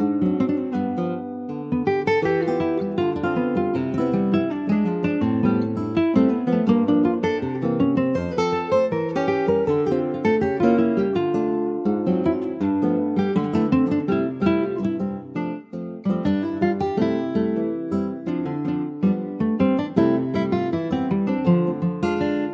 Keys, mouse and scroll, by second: 0.9-2.4 middle drag, 2.4 ctrl+r, 3.6-7.1 middle drag, 7.1 3, 7.4 click, 7.6 scroll down 3, 7.9-9.1 middle drag, 9.1 shift+click, 10.0-11.4 middle drag, 11.4 r, 14.8 shift+middle click, 16.4-17.6 shift+middle drag, 17.6 click, 22.1 alt+middle click.